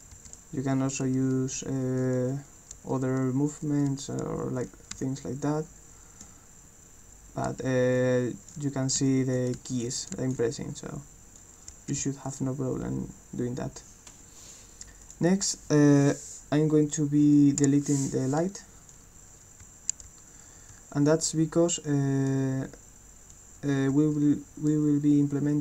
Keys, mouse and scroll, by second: 0.0-0.2 typing, 5.1-6.2 alt+drag, 8.0 alt+click, 9.1 alt+click, 9.7 alt+click, 10.1 click, 11.4-12.4 right drag, 11.5-12.5 typing, 15.0 click, 19.0-22.2 right drag, 19.7 s, 20.1 w, 20.7 a, 23.4-24.6 right drag, 23.9 w.